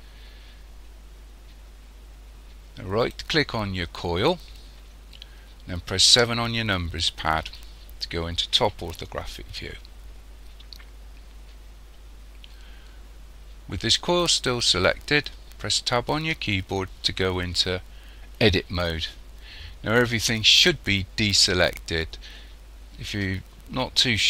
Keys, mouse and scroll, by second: 3.0 right click, 6.1 KP_7, 16.2 Tab.